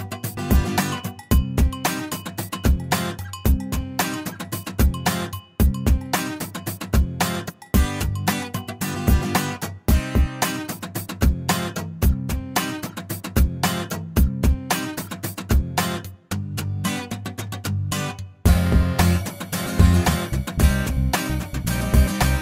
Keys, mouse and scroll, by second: 1.5 click, 2.7 click, 4.2 shift+o, 5.2 shift+middle click, 7.4-10.1 drag, 10.4 middle click, 11.9 l, 16.4 click, 20.3 click, 21.3 right click, 22.2 click.